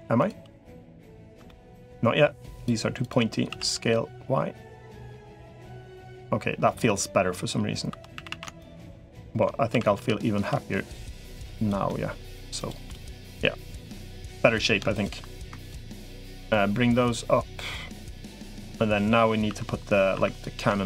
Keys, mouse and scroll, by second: 0.9 shift+click, 1.3 middle click, 3.3 s, 5.3-6.6 middle drag, 7.7 2, 7.9 a, 8.1 a, 9.5 s, 11.7 middle click, 12.7-13.7 middle drag, 14.1 3, 14.3 click, 14.7 shift+click, 15.7 shift+click, 16.3-18.3 drag, 18.4 middle click, 19.3 2, 20.1 click, 20.1 1.